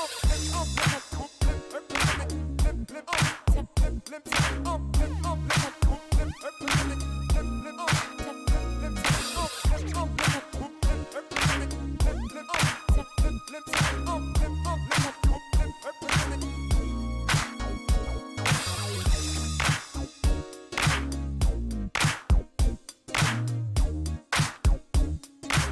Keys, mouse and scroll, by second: 0.3 click, 0.8 click, 2.1 click, 3.4 click, 5.4 click, 6.4 2, 6.5 Return, 8.3 click, 9.8 click, 11.5 click, 12.5 click, 13.6 click, 15.0 click, 16.1 click, 17.3 middle click, 18.9 click, 19.8 click, 22.1 scroll down 1, 22.8 click.